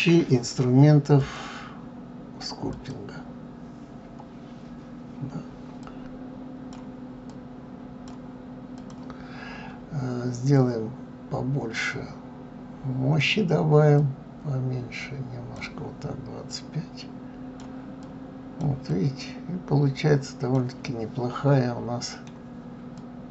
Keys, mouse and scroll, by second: 1.2-4.2 drag, 4.8-5.1 scroll up 2, 5.8-9.0 drag, 10.5-13.6 drag, 13.9-20.8 drag, 20.8-22.9 middle drag, 22.9-23.3 drag.